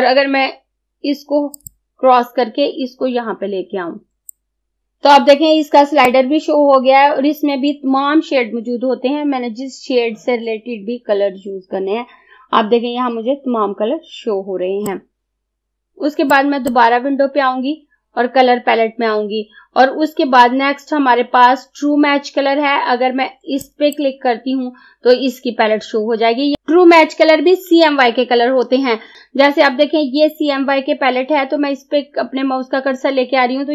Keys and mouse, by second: 1.6 click, 4.3-5.7 drag, 6.1-16.1 drag, 16.4-23.7 drag.